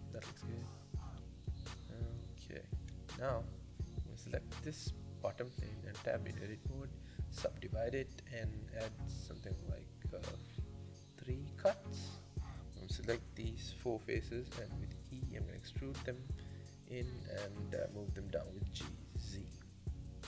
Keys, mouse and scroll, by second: 3.0-4.2 scroll down 1, 4.2 Tab, 4.5 click, 5.6 Tab, 6.2-8.3 right drag, 8.5-9.7 drag, 9.7 middle click, 10.1 scroll down 5, 10.4-11.5 middle drag, 11.5 3, 11.8 click, 12.3 shift+click, 12.6 shift+click, 12.9 shift+click, 13.7 e, 14.3 s, 16.0 g, 18.2 Tab, 18.5-19.5 middle drag, 19.5 scroll up 3, 19.7 middle click.